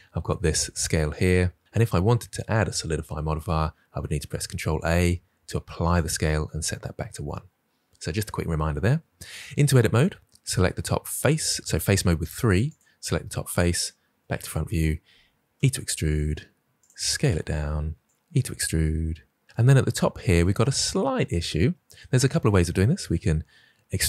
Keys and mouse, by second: 9.4 Tab, 9.9 middle drag, 11.6 3, 12.5 click, 13.9 KP_1, 14.8 e, 15.8 click, 16.1 s, 17.4 click, 17.7 e, 19.1 click, 23.9 e.